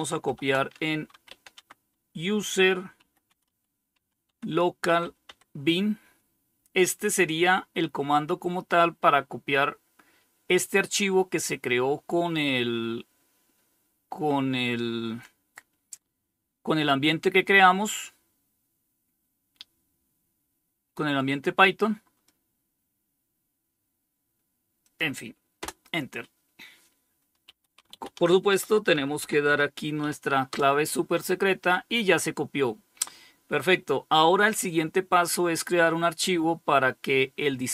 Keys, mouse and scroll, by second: 0.1-4.6 typing, 24.1 click, 24.9 Return, 26.4-30.4 typing.